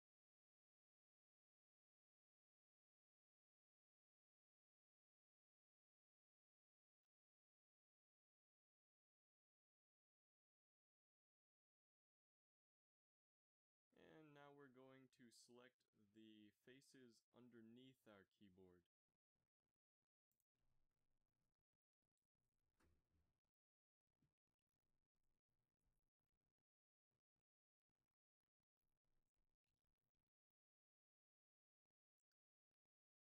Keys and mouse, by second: 0.0-0.6 typing, 6.2 middle click, 6.7 a, 8.6 ctrl+s, 9.4 Tab, 11.1 KP_7, 12.1 KP_Divide, 13.3 ctrl+Tab, 15.3 click, 29.1 c, 31.8-33.2 middle drag.